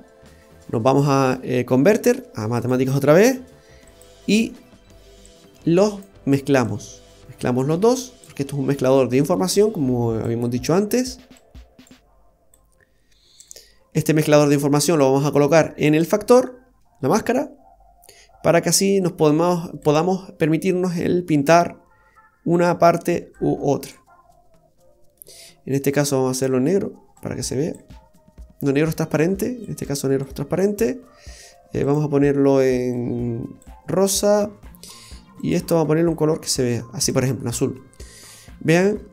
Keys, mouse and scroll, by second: 4.1 typing, 6.0 click, 6.6 click, 9.6 click, 11.4 click, 12.5 click, 13.8-14.4 scroll up 4, 14.6-15.0 scroll up 2, 15.0 click, 19.8 click, 22.5 click, 24.7-25.4 scroll up 2, 25.1 middle click, 26.3 click, 31.8 click, 35.4 click, 37.6-38.9 scroll up 2, 38.0 middle click, 39.0 scroll up 1.